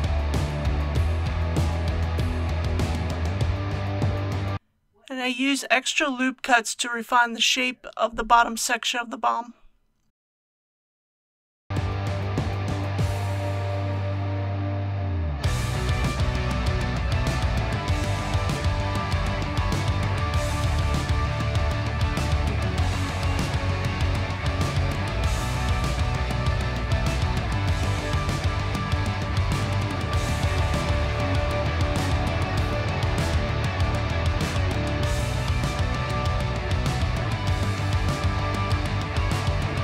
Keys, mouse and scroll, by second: 0.3 right click, 1.7 ctrl+z, 3.8 alt+a, 5.0 shift+r, 7.1 ctrl+r, 8.7-11.9 scroll up 1, 11.9 click, 13.4 typing, 17.4 click, 18.7 3, 19.9 click, 20.6 shift+click, 21.6 shift+click, 22.3 shift+click, 23.5 shift+click, 24.2 shift+click, 24.9-26.0 middle drag, 27.0 shift+click, 27.7 shift+click, 28.4 middle click, 29.8 shift+click, 30.3 shift+click, 31.1 middle click, 32.5 shift+click, 32.9 shift+click, 33.5 middle click, 35.3 shift+click, 35.7 shift+click, 36.3 middle click, 38.0 shift+click, 38.4 shift+click, 39.0-39.8 middle drag.